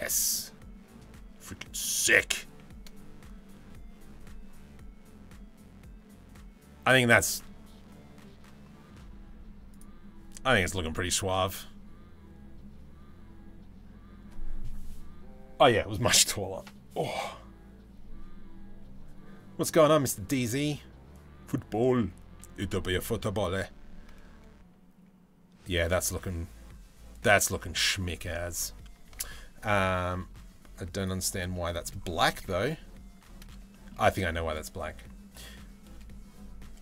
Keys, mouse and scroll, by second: 1.2 middle drag, 7.0-7.6 middle drag, 9.3 click, 10.6 h, 10.7 click, 11.0 h, 29.1 ctrl+s, 30.6 click, 31.1-31.7 shift+middle drag, 31.9-32.3 middle drag, 33.3 shift+middle drag.